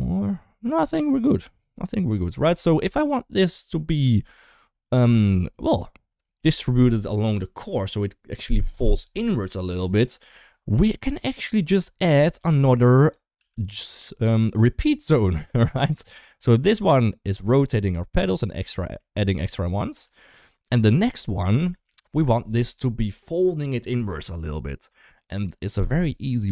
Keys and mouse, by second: 1.7 middle drag, 2.3 shift+middle click, 3.9 shift+middle click, 4.8 shift+middle drag, 5.0-5.6 middle drag, 6.0 shift+middle click, 11.4 middle click, 12.0 middle click, 12.5 click, 13.2 g, 15.1 shift+middle click, 16.2-16.7 drag, 17.1 click, 17.3 click, 18.3 click, 18.5 click, 18.9 middle click, 19.3 drag, 19.7 g, 21.5 shift+middle click.